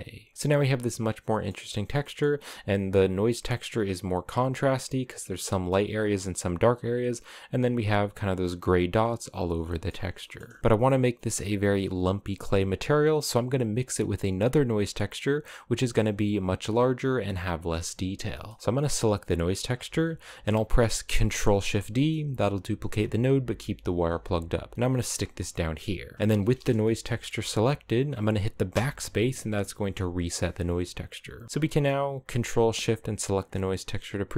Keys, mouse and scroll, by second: 0.3-2.9 shift+middle drag, 2.9 scroll up 1, 3.2-4.3 shift+middle drag, 4.3-5.7 scroll up 1, 5.7-6.3 scroll up 1, 6.3-8.7 drag, 9.0-9.9 scroll down 4, 9.3-9.8 shift+middle drag, 9.9-12.3 shift+middle drag, 13.0-16.8 middle drag, 17.3 scroll up 1, 17.4-18.6 middle drag, 18.6 click, 21.1 ctrl+shift+d, 25.0 scroll down 1, 25.2 middle click, 25.7-26.1 scroll up 2, 26.1 click, 26.7 middle click, 27.0 scroll up 2, 28.4 BackSpace, 29.3 click, 32.7 ctrl+shift+click, 33.2 click.